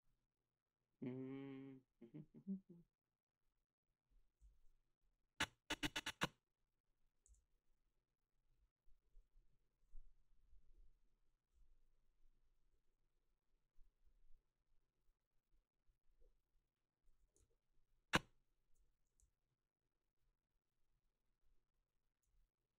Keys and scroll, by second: 7.3 g.